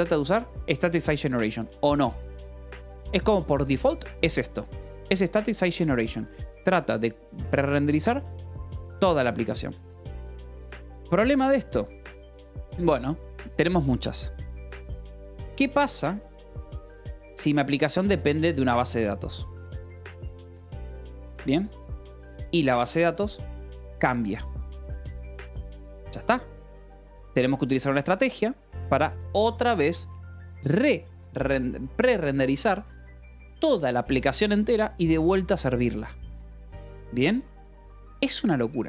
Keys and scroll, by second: 0.1 shift+v, 2.6 Escape, 4.4 j, 5.1 k, 6.1 Escape, 11.9-13.0 typing, 17.3 k, 18.3 shift+v, 18.3 Escape, 29.6 shift+v, 37.9 Escape.